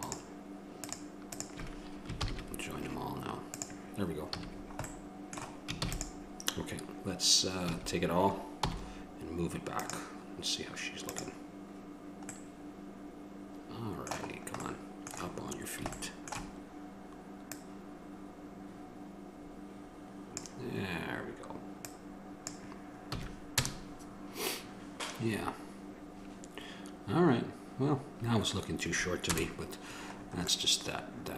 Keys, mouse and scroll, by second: 1.3-5.2 right drag, 2.4 ctrl+j, 4.6 a, 5.2 middle click, 6.0 ctrl+s, 8.0 a, 11.7 click, 12.7 middle click, 13.8 middle click, 14.9-19.6 middle drag, 19.6-20.6 drag, 23.3 a, 23.8 KP_0, 29.4 KP_0, 30.4 middle click.